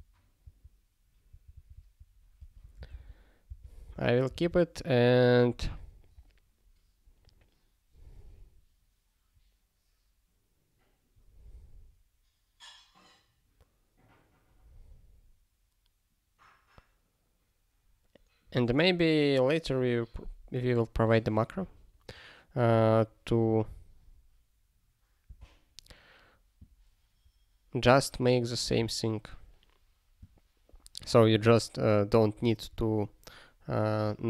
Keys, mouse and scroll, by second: 2.4 ctrl+p, 2.6 ctrl+a, 2.9 ctrl+alt+k, 3.5 ctrl+k, 4.3 ctrl+s.